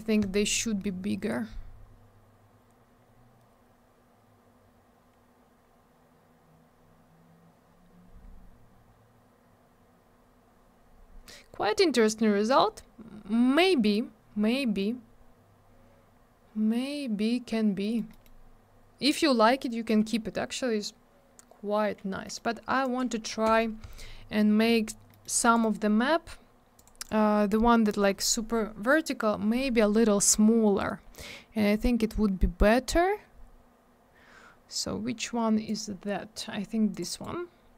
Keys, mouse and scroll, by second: 1.2 scroll up 1, 3.0-4.2 scroll down 1, 5.6-6.6 scroll up 1, 6.6-7.8 scroll down 1, 8.2-9.4 scroll up 1, 9.4-10.7 scroll down 1, 11.3-12.1 scroll up 1, 12.5 scroll down 1, 15.5-16.1 scroll up 1, 16.1-17.4 scroll down 1, 17.8 middle click, 17.9 middle click, 18.1 middle click, 18.2 double middle click, 22.2 middle click, 22.8 click, 23.3 1, 23.4 Return, 24.3 middle click, 24.7 middle click, 24.8 middle click, 25.1 middle click, 25.2 double middle click, 25.4 click, 25.5 click, 25.6 right click, 25.7 double right click, 26.7 click, 26.8 click, 27.0 click, 27.0 double click, 29.8 scroll up 1, 30.8 scroll down 1, 32.2-32.6 scroll up 1, 35.6 click, 36.9 click, 36.9 click, 37.1 right click, 37.2 double right click.